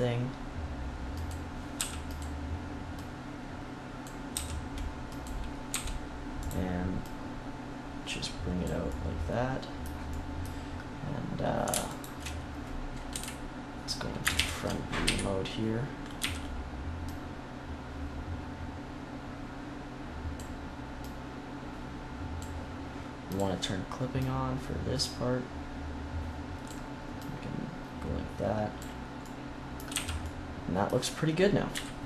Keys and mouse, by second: 1.2 click, 1.7 s, 2.0 click, 2.9-4.7 drag, 4.2 s, 5.6 e, 9.2-10.3 middle drag, 11.8-13.0 right drag, 13.0 KP_1, 14.2 ctrl+KP_1, 14.9 KP_1, 16.1 z, 16.9-19.3 drag, 20.9-26.5 drag, 27.1-29.1 drag, 29.1 middle click, 29.8 z, 31.6 KP_3.